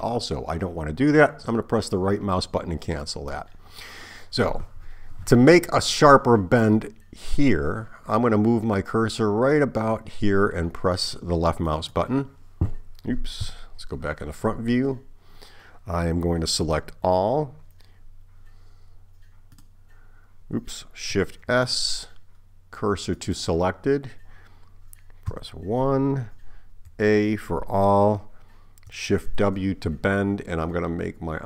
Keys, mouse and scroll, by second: 11.7 click, 13.4 KP_1, 16.6 a, 19.6 click, 21.5 shift+s, 25.3 KP_1, 26.9 a, 29.4 shift+w.